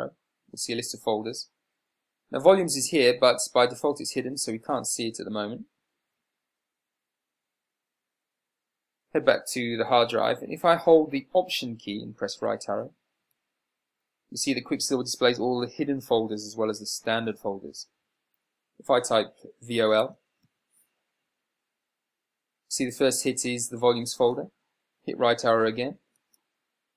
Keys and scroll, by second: 0.2 Right, 2.1 Down, 5.3 Down, 20.4 v, 20.8 l, 26.6 Right.